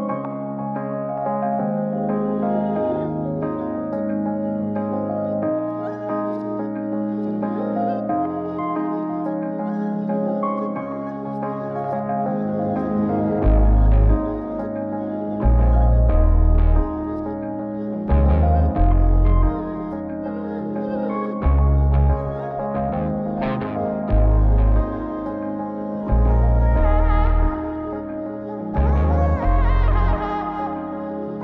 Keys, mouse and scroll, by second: 0.7 click, 3.8 click, 4.8-7.2 drag, 7.4 click, 9.2-10.6 drag, 12.7 click, 14.5-17.8 drag, 20.9 click, 23.4 middle click, 24.2 click, 24.6 g, 28.7 click, 29.3 middle click, 30.2-30.5 shift+middle drag, 30.6-31.0 scroll up 3, 31.0 middle drag.